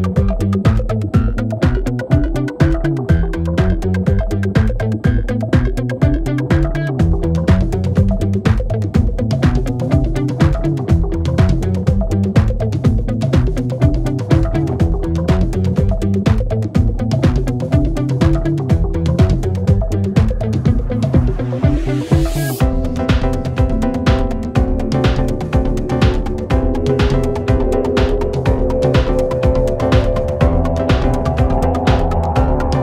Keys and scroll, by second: 0.4-0.8 typing, 0.9 Return, 1.3 F1, 2.7 ctrl+d, 4.1 shift+f, 4.2 shift+i, 4.5 shift+e, 4.6 Return, 9.4 F1, 11.9 ctrl+d, 16.5 ctrl+d, 20.4 F1, 20.5 F2, 21.2 ctrl+d, 26.2 p, 29.1 F1, 30.7 F1.